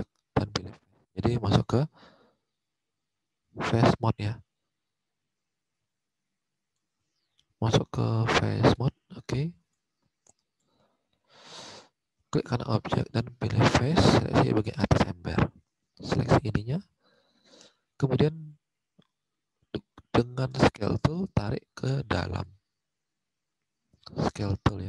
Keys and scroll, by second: 0.8 alt+Tab, 2.1 alt+Tab, 5.7 alt+Tab, 10.6 alt+Tab, 15.1 alt+Tab, 16.8 alt+Tab, 22.3 alt+Tab.